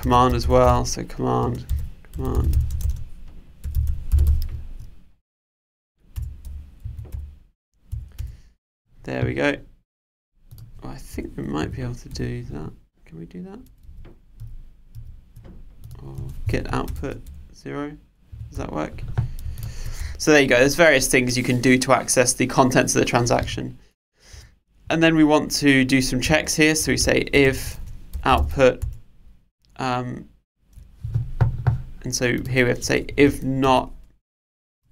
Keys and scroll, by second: 6.2 Return, 13.9 super+z, 28.8 Return.